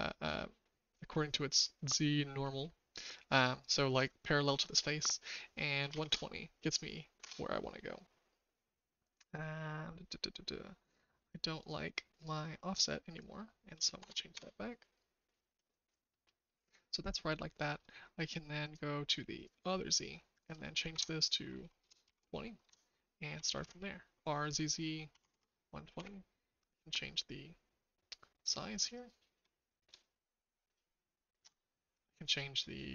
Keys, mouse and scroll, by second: 12.8-14.7 drag, 16.1 middle click, 16.4 middle drag, 17.3 shift+middle click, 20.3 click, 20.9 Tab, 21.8 typing, 22.6 Tab, 23.2 r, 28.9-31.4 drag.